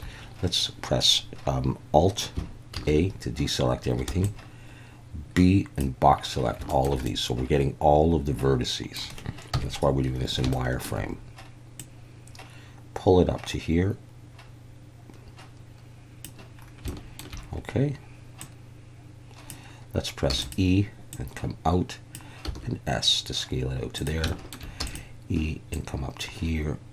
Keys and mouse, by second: 2.7 alt+a, 4.1 b, 6.7 shift+middle click, 7.0-9.0 middle drag, 9.5 KP_1, 10.5 shift+middle click, 11.8 click, 17.0 shift+middle click, 18.4 click, 20.3 e, 20.4 click, 22.4 s, 23.9 click, 24.4 shift+middle click, 24.8 e, 24.9 click, 25.7 click.